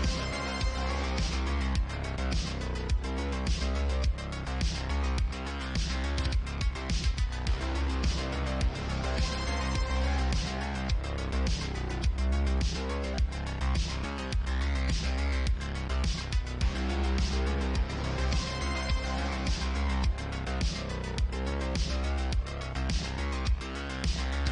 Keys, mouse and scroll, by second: 1.0-13.5 drag, 13.5 middle click, 13.7-24.5 drag, 16.3-17.5 middle drag, 16.3-17.5 right drag, 17.8 middle click, 17.8 right click, 19.5 ctrl+w.